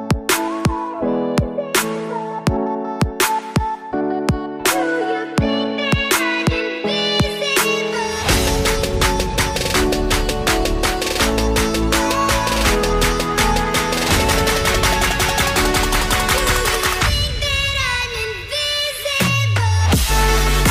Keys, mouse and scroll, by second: 10.4 double click, 13.1 Delete, 15.9 Delete, 18.2 double click, 19.9 Delete.